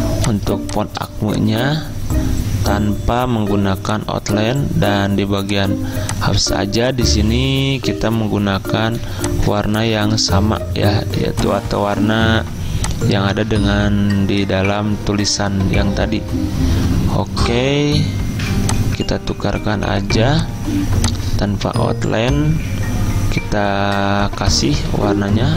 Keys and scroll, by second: 9.0 z, 24.8 F6.